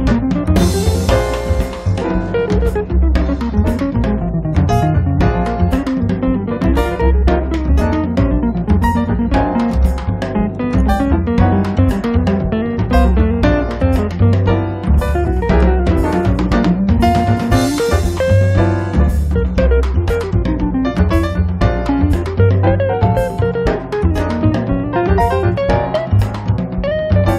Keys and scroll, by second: 0.0 Return, 0.9 space, 3.2 m, 4.2 Up, 8.0 Up, 9.0 1, 9.3 Return, 9.8 space.